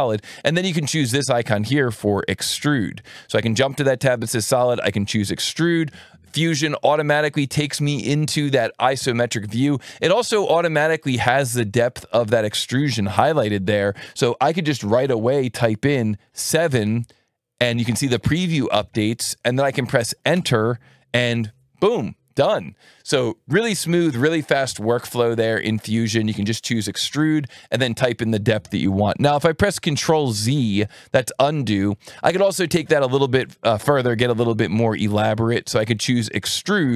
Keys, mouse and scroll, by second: 0.9 ctrl+shift+click, 2.5 alt+1, 4.5 click, 16.4 KP_7, 20.3 KP_Enter, 30.5 ctrl+z, 33.4 click, 36.5 click.